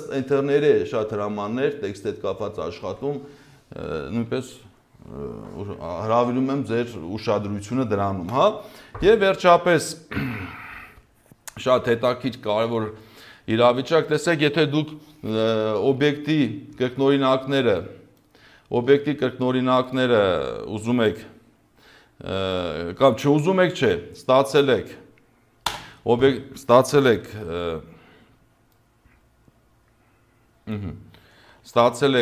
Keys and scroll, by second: 9.2 Delete, 25.6 space, 27.2 ctrl+z, 31.5 space.